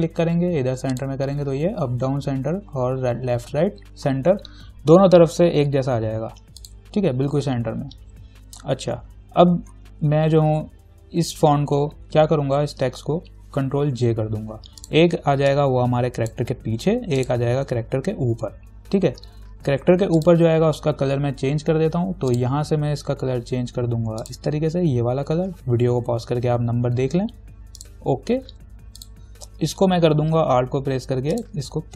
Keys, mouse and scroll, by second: 6.8 click, 10.3 t, 12.8 v, 14.2 ctrl+j, 15.0-17.4 drag, 19.9 t, 20.4 click, 20.7 ctrl+a, 22.5 click, 28.0 click, 31.6 alt+click.